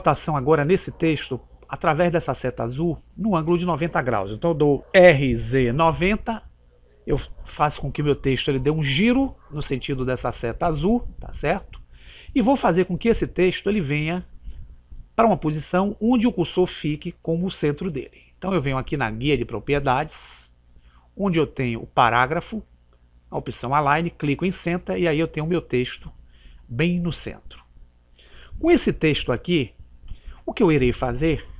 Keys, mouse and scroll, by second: 4.9 r, 19.5 click, 24.4 click, 28.4-30.0 middle drag, 30.0-30.7 scroll up 1, 30.7-31.5 scroll down 1.